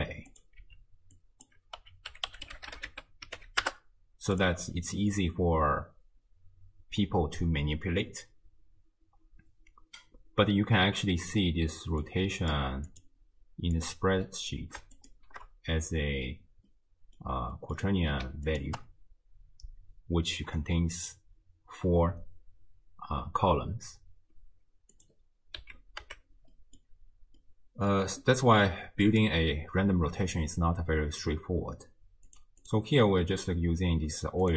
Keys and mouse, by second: 0.3 click, 1.2-4.5 drag, 12.0 click, 12.9 click, 14.3-14.6 middle drag, 15.0 ctrl+shift+click, 16.8 middle click, 17.6 middle drag, 18.5 ctrl+shift+click, 25.0 click, 25.6 z, 26.1 x, 26.5-26.9 drag, 27.4-27.9 drag, 29.1 click, 32.7 click.